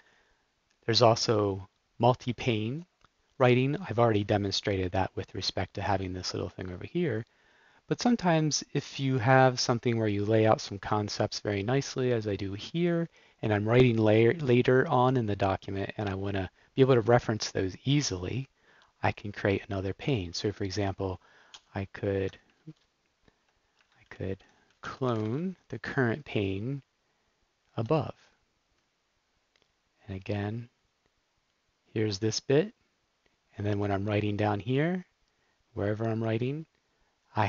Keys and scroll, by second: 21.5 shift+super+k, 22.5 super+z, 24.0 shift+super+p, 24.4-25.6 typing, 27.7 Return.